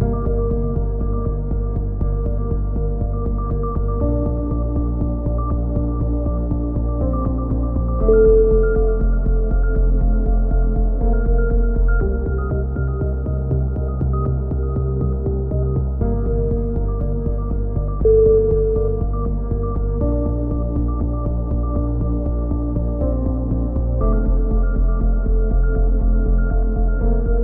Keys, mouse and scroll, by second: 0.6-1.6 drag, 2.6 middle click, 3.3 a, 4.5 click, 5.4-9.2 middle drag, 7.9 KP_3, 9.2 click, 10.0 middle click, 10.8 click, 11.1-12.6 drag, 11.8 right click, 13.2 a, 13.6 middle click, 14.1-16.1 right drag, 16.1 click, 18.0 right click, 18.6 c, 20.0 click, 21.4 click, 22.3 c, 22.7 right click, 24.0-25.3 middle drag, 24.5 c, 26.0 a, 26.2-27.4 middle drag, 26.4 Tab, 27.3 KP_3.